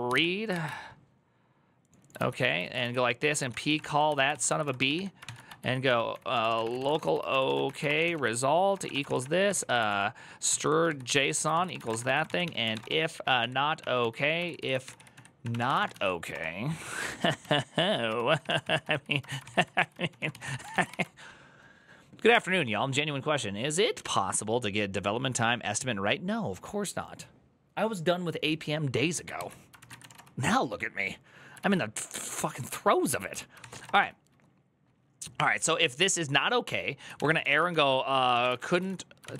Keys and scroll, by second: 0.0-0.4 typing, 1.8-19.6 typing.